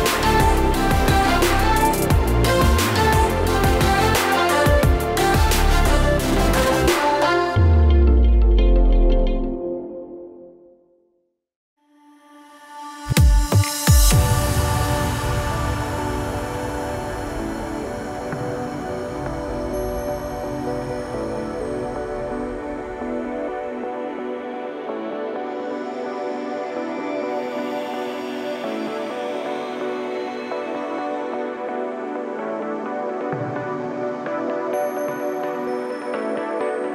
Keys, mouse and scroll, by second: 0.4 Delete, 1.4 click, 1.6 scroll down 4, 1.7 middle click, 2.1 scroll up 3, 2.4 scroll down 2, 2.5 scroll up 2, 2.7-3.3 scroll down 2, 3.8 Tab, 4.4 click, 4.6 click, 7.0 click, 7.4 click, 7.6 Tab, 7.8 a, 8.1 a, 8.2 shift+click, 8.5 shift+click, 8.9 middle click, 9.2 shift+click, 9.3-9.7 scroll down 9, 9.6 middle click, 9.8 shift+click, 9.9 middle click, 10.1 shift+click, 10.3 middle click, 10.5 shift+click, 11.0 shift+click, 11.2 shift+click, 11.4 middle click, 12.2 click, 12.9 click, 13.6 click, 14.8 click, 15.2 z, 15.7 z, 16.0 click, 16.5 a, 16.6 a, 16.8 click, 17.1 middle click, 17.1 scroll up 1, 17.9 middle click, 18.1 scroll up 10, 18.4 middle click, 19.1 scroll up 1, 19.2 middle click, 19.6 click, 19.8 middle click, 20.1-21.1 scroll up 13, 20.2 shift+middle click, 21.2-21.6 scroll down 5, 21.4 scroll up 1, 21.9 click, 22.4 click, 23.0 click, 24.0-24.4 scroll up 6, 24.2 middle click, 24.5 shift+a, 26.3 click, 28.8 click, 29.3 click, 30.6 click, 31.7-32.6 scroll down 17, 32.1 middle click, 32.5 middle click, 32.8 shift+middle click, 33.5 click, 34.2 click, 34.6-35.1 scroll up 4, 35.0 a, 35.4 shift+click, 35.6 shift+middle click, 35.8 middle click, 36.0 shift+click, 36.1 middle click, 36.3 shift+click, 36.4 middle click, 36.7 shift+click.